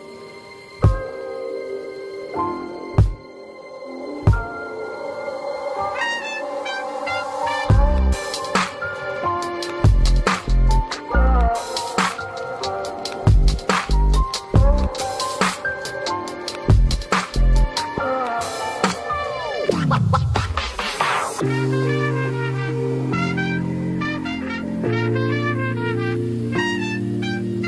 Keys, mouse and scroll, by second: 8.2 double click, 13.0 double click, 13.4 double click, 15.5 double click, 21.1 double click, 23.5 double click.